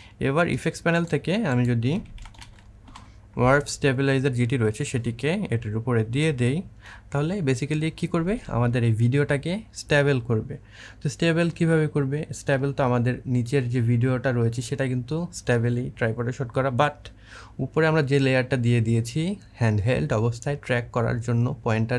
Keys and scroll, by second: 1.6-3.2 typing.